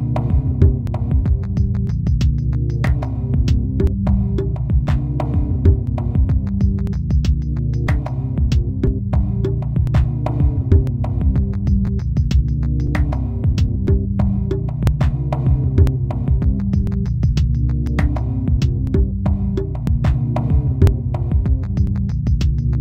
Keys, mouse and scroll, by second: 0.3 l, 2.5 right click, 2.5 a, 3.8-7.3 typing, 10.3 w, 13.2 middle click, 13.9-14.3 scroll up 1, 14.3 shift+middle click, 14.8 z, 15.0 middle click, 16.4-16.8 scroll down 5, 17.0 middle click, 17.5 scroll down 1, 17.9 Tab, 18.3-18.9 scroll up 2.